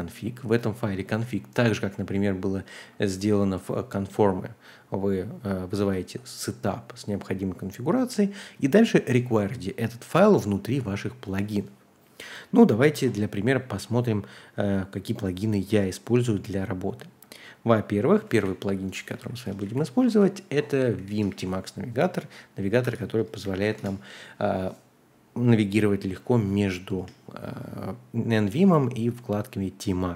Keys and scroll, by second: 18.3 super+c, 19.1 a, 19.5 Return, 19.6 super+v, 20.0 Escape, 20.9-21.8 typing, 22.8-24.1 typing, 26.9 Return.